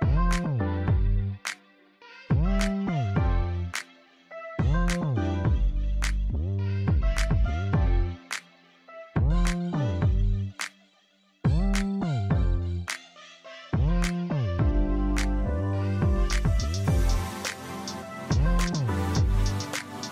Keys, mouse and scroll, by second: 2.8 middle click, 4.8 click, 8.4-8.7 scroll up 1, 9.9 click, 11.1 KP_0, 11.4 KP_Enter, 12.9 scroll down 1, 13.8 scroll up 1, 14.3 alt+click, 14.9 scroll down 1, 15.2 alt+click, 17.2 click, 18.8 BackSpace, 19.4 KP_0, 19.9 KP_5.